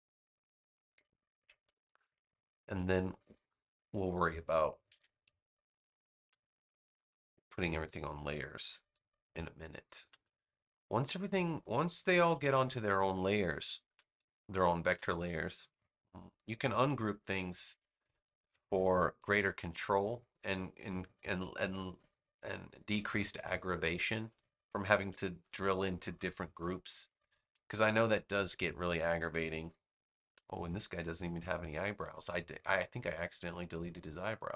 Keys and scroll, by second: 1.3 super+g, 1.9 space, 4.8 super+g, 5.4 space, 8.5 super+g, 9.4 space, 12.2 super+g, 13.0 space, 17.2 super+g, 18.0 space, 21.2 super+g, 22.1 space, 25.0 super+g, 25.7 space, 30.2 super+g.